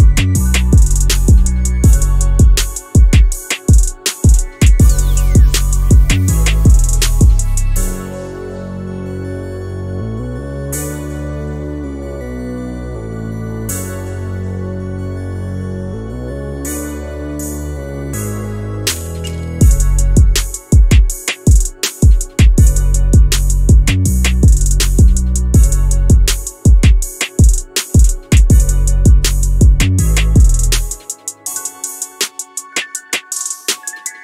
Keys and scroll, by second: 1.8 Escape, 7.1 Escape, 8.1 1, 8.2 0, 8.2 Return, 8.4 0, 8.5 Return, 14.5 Escape, 31.2 Escape, 33.4 Return.